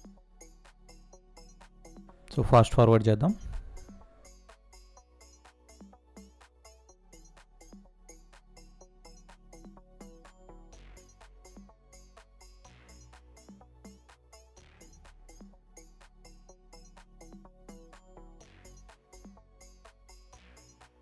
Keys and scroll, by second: 5.4 space, 8.0 space, 11.6 space, 12.7 space, 18.2 space.